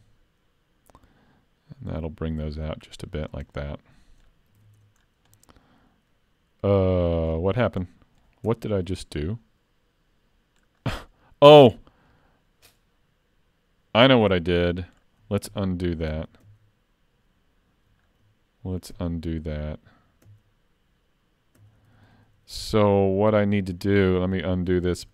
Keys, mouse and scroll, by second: 3.5 middle click, 4.6 alt+a, 4.8 Tab, 5.0-5.4 scroll down 2, 5.4 middle click, 7.5 scroll up 3, 7.9 middle click, 8.5 Tab, 9.0 middle click, 10.8-11.3 scroll up 4, 11.3 middle click, 11.8 scroll down 3, 12.2 middle click, 14.8 middle click, 15.5 ctrl+z, 16.1 ctrl+z, 16.4 ctrl+z, 17.9-19.0 scroll down 3, 19.0 ctrl+z, 20.2 ctrl+z, 21.6 ctrl+z, 21.8 ctrl+z, 21.9 ctrl+z, 22.2 ctrl+z, 22.4 ctrl+z, 22.5 ctrl+z, 23.4 ctrl+z, 23.6 ctrl+z, 23.8 ctrl+z, 24.0 ctrl+z, 24.2 ctrl+z, 24.4 ctrl+z, 24.6 ctrl+z, 24.8 ctrl+z, 25.0 ctrl+z.